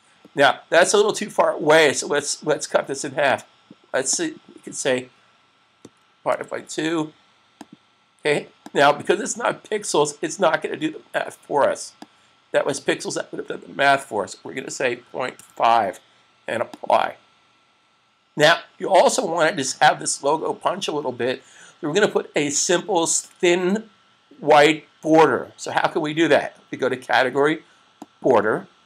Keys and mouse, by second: 3.2 click, 5.7 /, 6.2 2, 7.5 click, 11.7 click, 15.2 typing, 16.7 click, 28.0 click.